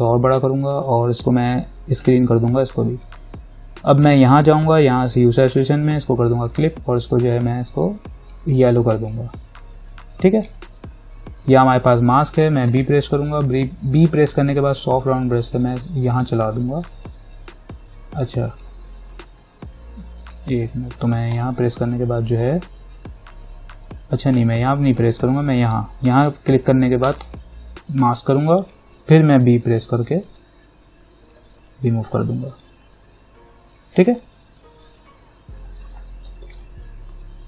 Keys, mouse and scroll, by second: 12.9 b, 13.5-15.8 alt+right drag, 15.8 click, 19.1 ctrl+z, 20.6 ctrl+shift+z, 21.5 click, 25.4 click, 30.1 b, 30.6-31.8 alt+right drag, 31.8 click, 32.7 click, 36.7 ctrl+=.